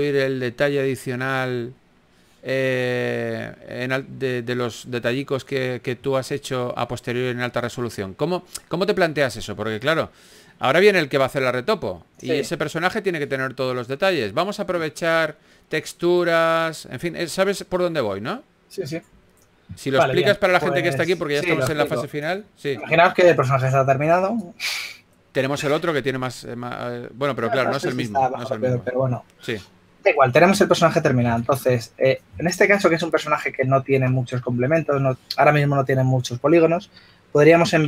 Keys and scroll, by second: 12.8 f, 31.3 typing.